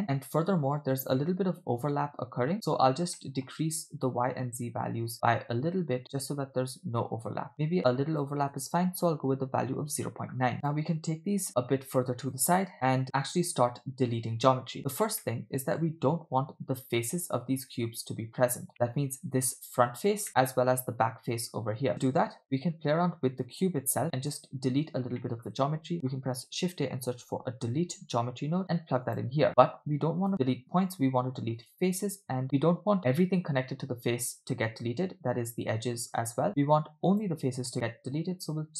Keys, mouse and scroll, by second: 0.9 scroll up 2, 2.8 scroll up 1, 3.2 shift+middle click, 4.1-7.6 shift+drag, 7.8-9.8 shift+drag, 10.6 click, 10.6 middle click, 11.3-12.4 drag, 12.9 middle click, 13.0-13.4 scroll up 3, 14.1-14.6 scroll down 4, 15.3 middle click, 18.7 middle click, 20.3 middle click, 21.9 middle click, 22.4 middle click, 23.4 click, 24.8-25.2 scroll up 3, 25.2 middle click, 25.7 shift+a, 29.5-30.2 scroll up 3, 30.2-31.7 drag, 37.1-38.7 drag.